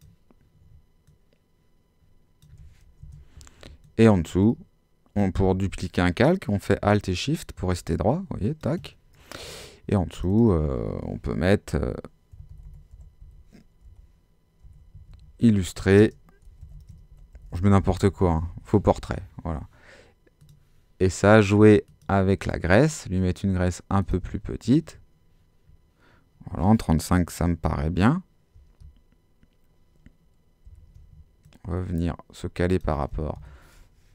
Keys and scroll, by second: 3.0 shift+Return, 5.5 alt+shift+super+z, 12.1-19.3 typing, 30.6 super+t, 33.3 shift+Home.